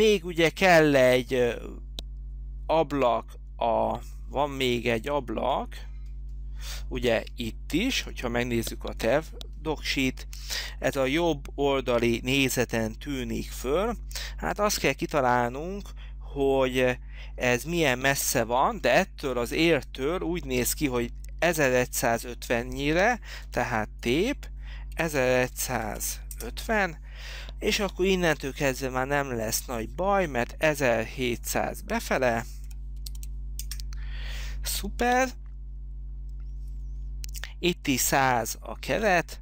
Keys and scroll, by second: 23.8 t, 25.0-26.5 typing, 32.1-33.7 typing, 33.7 Return.